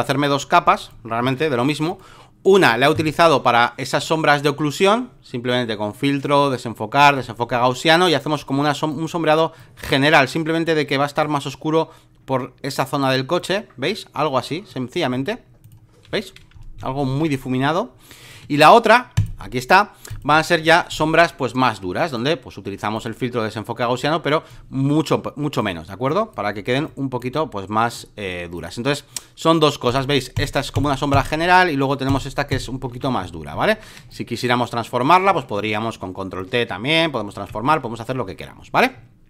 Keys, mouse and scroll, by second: 1.2 ctrl+z, 1.8-5.9 drag, 6.2-16.0 drag, 16.0 v, 17.2 space, 17.3 click, 19.1-32.9 drag, 32.9 v, 33.2 alt+middle click, 33.5 alt+middle click, 33.9 space, 34.1 click, 35.5 ctrl+t, 36.3 ctrl+click, 37.6 Escape, 38.2 alt+middle click.